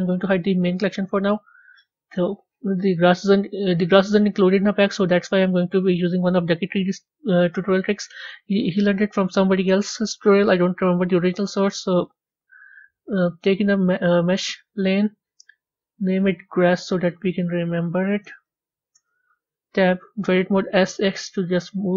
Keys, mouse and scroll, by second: 0.6 click, 1.7 scroll up 3, 7.0 scroll up 3, 8.6 KP_1, 9.6-12.0 shift+middle drag, 12.0 shift+a, 15.7-16.4 scroll down 3, 16.4 click, 16.6-18.2 drag, 18.2 s, 19.7 b.